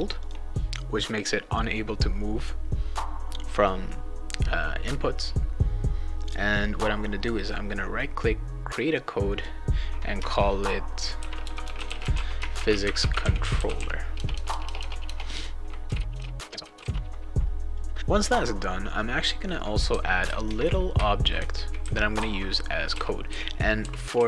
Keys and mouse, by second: 0.2 click, 7.4 right click, 9.3 click, 10.9-17.3 typing, 17.7 click, 17.9 click, 19.2-24.2 right drag, 19.9-24.1 typing.